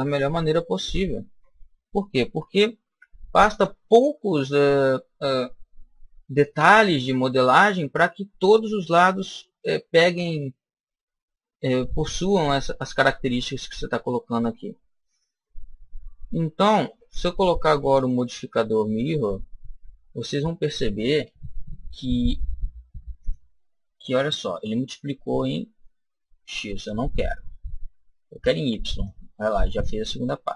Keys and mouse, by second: 2.8 b, 6.4 Delete, 8.4-10.3 middle drag, 15.5-17.5 middle drag, 17.8 click, 24.2-26.1 middle drag, 26.6-30.5 drag, 29.9-30.5 middle drag.